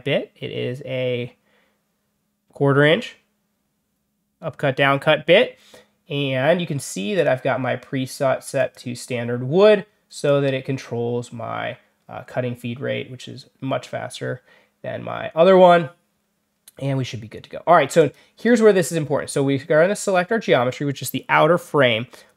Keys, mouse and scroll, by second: 7.1 click, 8.5 click, 10.2 click, 17.9 click, 19.9 click.